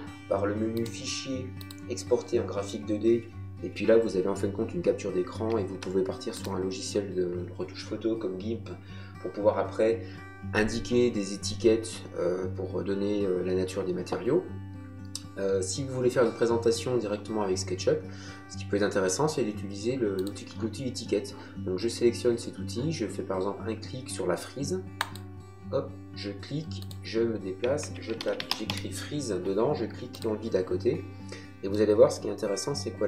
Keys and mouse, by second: 0.7 click, 5.7 Escape, 6.3 click, 20.2 click, 25.0 click, 26.8 click, 27.8 Caps_Lock, 27.8-29.1 typing, 30.1 click, 31.7 middle click.